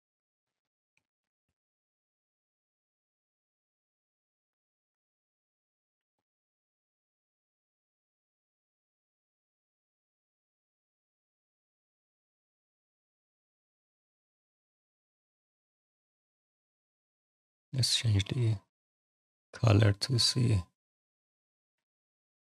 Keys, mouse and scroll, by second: 0.2 alt+middle click, 0.6 alt+click, 1.0 click, 1.3 right click, 2.5 right click, 3.7 click, 4.8 click, 5.1 alt+click, 5.7 click, 5.9 alt+click, 6.1 alt+right click, 7.4 click, 8.9 click, 9.9 click, 10.4 click, 11.7 click, 15.7 click, 16.3 click, 18.3 click, 21.3 click, 21.6 alt+click, 22.0 right click.